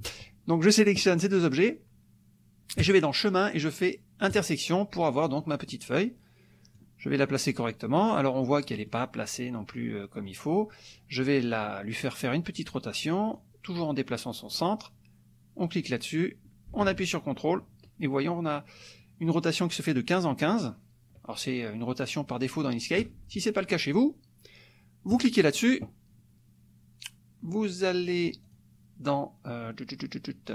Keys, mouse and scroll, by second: 2.8 click, 4.4 click, 5.4 click, 6.7-8.3 drag, 8.5 click, 8.9 click, 13.5-14.7 drag, 15.6-23.1 drag, 25.1 click, 28.4 click, 30.4 click.